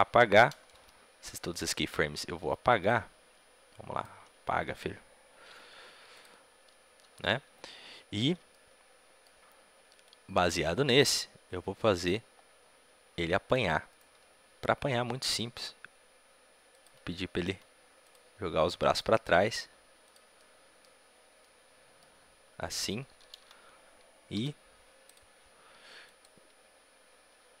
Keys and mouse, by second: 1.2 Delete, 1.2 c, 6.1 x, 8.4-10.0 middle drag, 8.4 a, 10.0-12.3 drag, 12.3-13.8 middle drag, 13.8-15.5 right drag, 15.2 r, 17.3-19.2 drag, 17.3-19.2 right drag, 17.4 r, 19.2 r, 19.9 right click, 20.4-23.1 drag, 23.1 a, 23.3 a, 25.0 i, 26.0-27.6 drag.